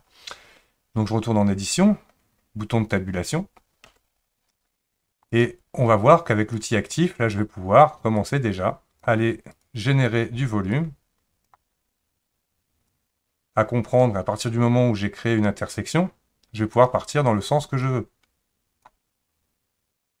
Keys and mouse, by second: 3.9 Tab, 5.4 click, 6.6 click, 8.2 click, 9.6-11.5 drag, 12.9-14.0 drag, 16.7 click, 17.8-18.9 drag.